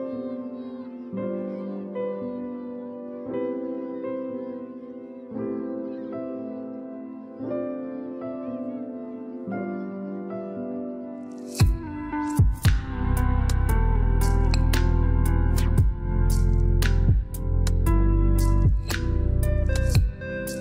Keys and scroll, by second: 7.5 0, 8.2 Return, 19.2 3.